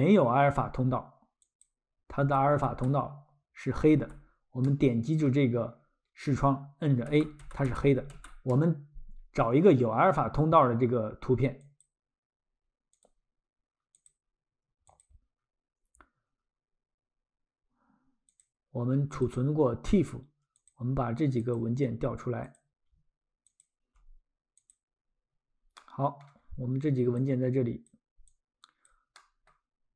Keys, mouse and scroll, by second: 0.0 click, 1.6 click, 2.2-2.6 typing, 3.9 typing, 4.6 middle click, 5.8-6.2 scroll, 7.1-8.1 typing, 11.6 click, 18.3 click, 21.4 shift+click, 23.4 shift+click, 25.8 middle click, 26.4-27.0 scroll, 27.2 click, 28.3 click, 29.2 middle click.